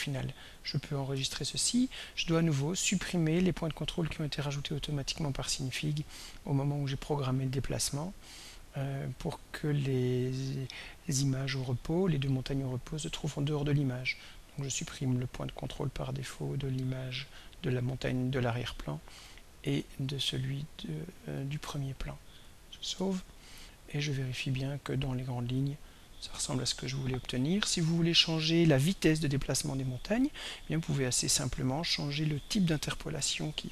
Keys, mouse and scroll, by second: 1.4 ctrl+s, 5.4-12.7 drag, 14.6 right click, 16.2 click, 18.1 click, 19.9 right click, 21.4 click, 23.2 ctrl+s, 24.2-30.4 drag.